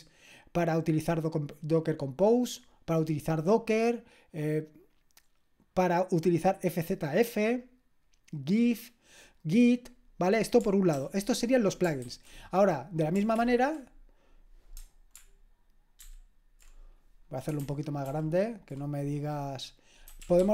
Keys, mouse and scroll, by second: 4.4-6.1 scroll down 1, 6.1-11.0 drag, 11.0 ctrl+p, 12.0 ctrl+w, 13.4 ctrl+l, 16.0 ctrl+alt++, 19.8-20.5 typing.